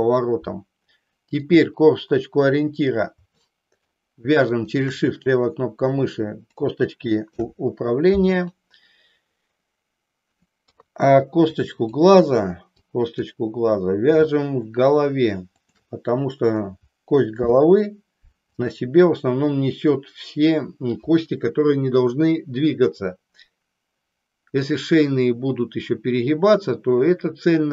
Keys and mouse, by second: 1.3 click, 3.5 shift+middle click, 4.6 shift+click, 7.2 ctrl+p, 10.6 KP_3, 11.6 click, 12.7 click, 14.3 shift+middle click, 17.3 ctrl+p.